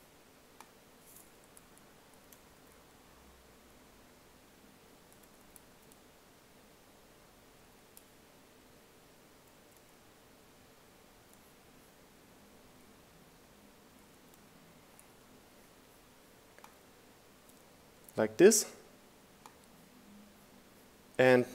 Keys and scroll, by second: 0.0 shift+Down, 0.4 Up, 3.1 Up, 5.5 Down, 6.5 Down, 7.4 Up, 7.8 Down, 11.8 Up.